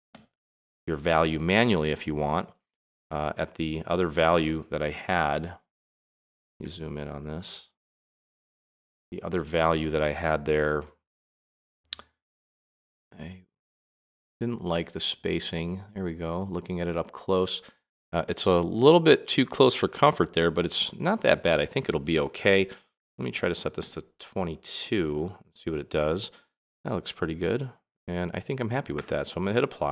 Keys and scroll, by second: 0.1 x, 6.6 super+=, 22.9 BackSpace, 23.8 2.